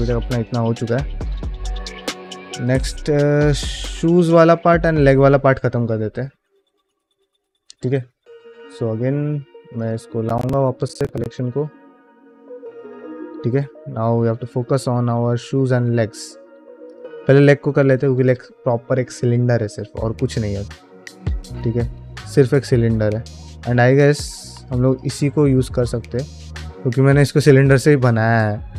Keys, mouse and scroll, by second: 0.6 click, 0.6 scroll down 1, 1.2 click, 1.4 q, 2.7 shift+middle drag, 3.0 click, 3.3 middle drag, 3.7 shift+middle click, 4.0-4.4 scroll up 2, 4.4 shift+middle click, 11.9 click, 12.9 middle drag, 14.0 alt+middle click, 14.4 scroll up 1, 14.7 scroll down 1, 14.9 shift+middle click, 15.3-15.7 middle drag, 15.9 shift+middle drag, 16.2 middle drag, 16.7 click, 17.1-17.6 middle drag, 17.8 middle click, 20.7 Tab, 21.1 middle click, 21.7 alt+middle click, 22.0-23.5 scroll up 5, 23.5 Tab, 23.5 scroll up 1, 24.0 Tab, 24.4 alt+z, 24.6 scroll down 2, 24.9-27.2 middle drag, 27.4 alt+z, 27.9-28.7 scroll down 1.